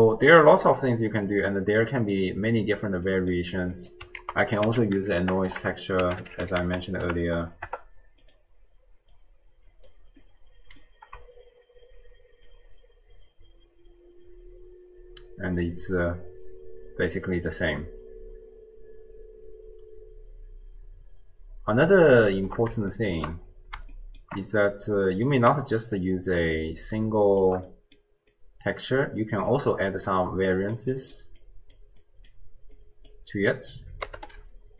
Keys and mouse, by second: 1.6 middle click, 3.1 middle click, 3.8 click, 4.2 ctrl+a, 5.5 BackSpace, 5.6 BackSpace, 7.3 Down, 9.2-10.2 drag, 10.4 middle click, 12.5-22.5 shift+drag, 22.9-23.3 shift+drag, 23.9-24.3 shift+middle drag, 24.5 middle click, 26.0-27.5 shift+drag, 27.7 middle click, 28.3-29.5 drag, 30.1 click, 31.0 middle click, 31.4-31.8 drag, 32.0 click, 32.8 click, 33.8-34.7 drag, 34.4 d.